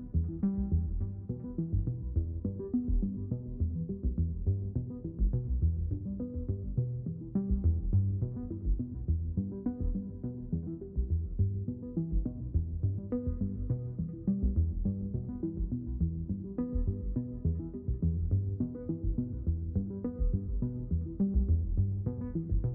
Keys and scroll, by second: 11.4-12.5 typing.